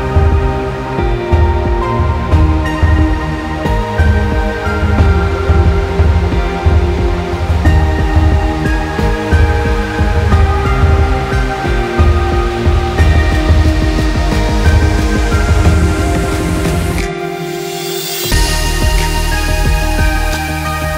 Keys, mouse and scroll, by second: 1.3 click, 1.6 click, 2.0 click, 2.3 scroll up 1, 2.4 middle click, 3.1 click, 3.6 middle click, 4.1 shift+click, 4.6 middle click, 5.2 e, 6.1 click, 6.3 middle click, 6.8 middle click, 7.4 click, 8.5 e, 9.6 click, 10.4 middle click, 11.0 e, 12.8 click, 13.3 e, 14.0 click, 14.4 middle click, 14.7 scroll up 2, 15.4 click, 15.7 e, 16.9 click, 17.4 middle click, 17.8 middle click, 18.2 scroll down 3, 18.3 middle click, 18.6 middle click, 19.2 middle click, 19.6 middle click, 20.2 KP_1, 20.7 click.